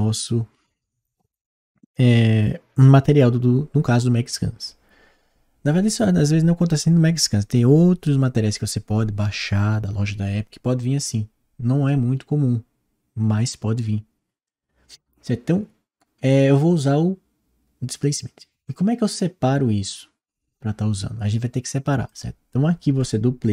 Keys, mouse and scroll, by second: 21.9-23.0 drag.